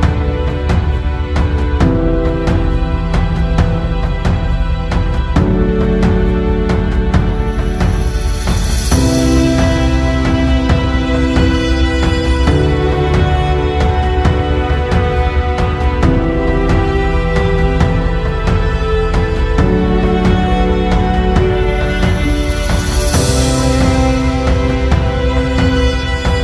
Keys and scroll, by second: 0.8 Tab, 2.4 Tab, 2.6 l, 7.8 l, 8.9 Tab, 14.7 Tab, 14.9 l, 17.9 Tab, 18.5 l, 19.6 Tab.